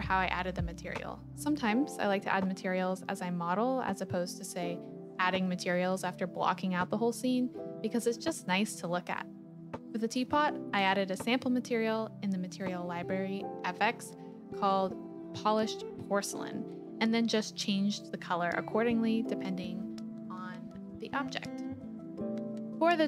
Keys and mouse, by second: 0.8 shift+click, 1.7-2.7 drag, 2.7-4.4 middle drag, 4.8 click, 5.4-6.9 middle drag, 7.2 click, 8.0 KP_1, 13.1 click, 15.5 click, 18.0 click, 19.9 click.